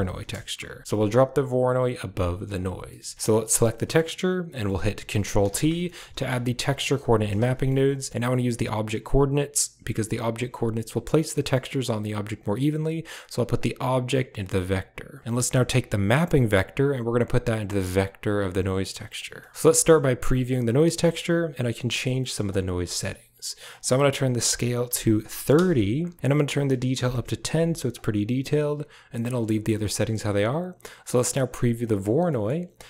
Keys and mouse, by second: 2.7 middle click, 3.1 click, 3.6 middle click, 4.3 middle click, 5.4 ctrl+t, 5.7 middle click, 6.0 a, 6.7 click, 6.8 g, 7.2 a, 7.4 middle click, 8.0 click, 11.3 click, 13.4-14.2 drag, 14.6 click, 16.4-18.4 drag, 19.2 click, 20.1 ctrl+shift+click, 20.9 shift+click, 23.6-25.4 drag, 26.4-27.9 drag, 29.3 middle click, 31.0 ctrl+shift+click.